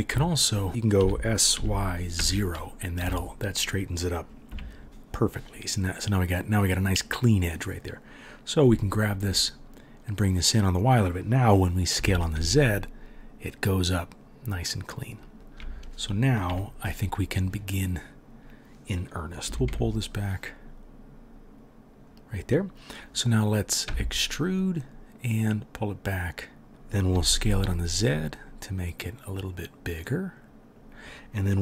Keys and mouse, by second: 0.1 KP_3, 1.0 s, 4.5 KP_3, 8.6 g, 11.9 s, 16.5 KP_3, 19.5 g, 23.8 e, 27.1 s.